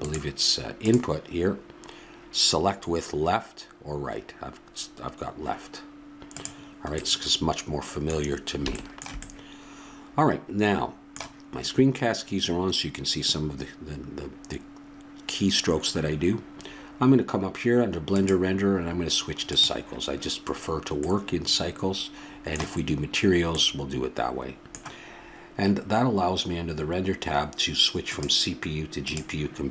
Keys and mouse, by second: 18.1-19.9 drag, 23.8-28.1 middle drag, 28.1-29.7 drag.